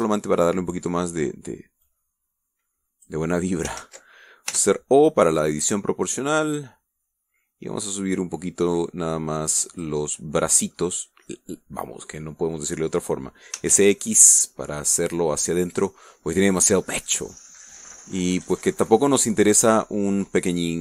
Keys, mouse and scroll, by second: 0.8 shift+right click, 1.1 shift+middle click, 2.7-4.1 drag, 4.7 ctrl+z, 6.6-10.9 drag, 10.9 middle click, 12.1 click, 12.2-13.6 middle drag, 14.4 s, 14.6 x, 17.4 click, 18.4 scroll up 1, 18.5 scroll down 1, 18.8 click, 20.2 click.